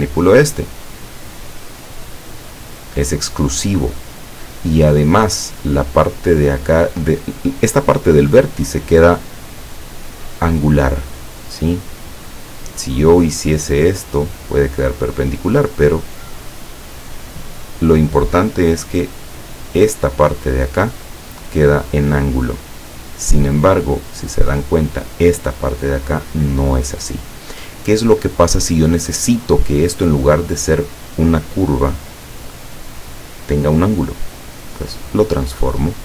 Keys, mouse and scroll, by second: 0.7-5.5 drag, 13.7-17.7 drag, 22.6-23.3 scroll down 4, 24.4 click.